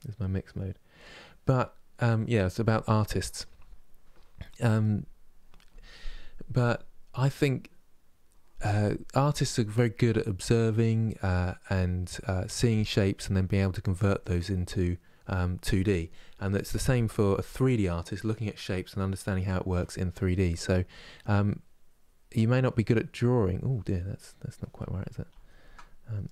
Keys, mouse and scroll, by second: 0.7 click, 1.2-21.5 middle drag, 21.5-23.1 drag, 23.1-24.5 middle drag, 24.5 ctrl+z, 25.0 ctrl+z, 26.0 middle click.